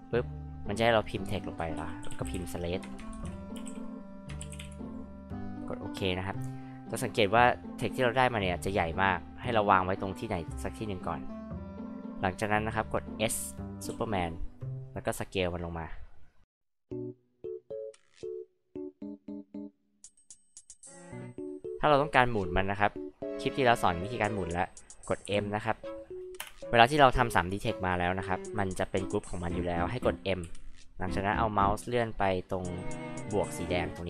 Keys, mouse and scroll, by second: 1.5-5.1 typing, 5.6 click, 6.6 middle drag, 11.2 click, 12.3 scroll down 2, 12.5-13.0 scroll up 2, 13.9 s, 14.3-14.6 scroll up 2, 15.2-16.6 drag, 17.5-18.8 drag, 19.4 click, 19.9 scroll up 2, 20.4 click, 25.2 m, 26.4 space, 30.4 m.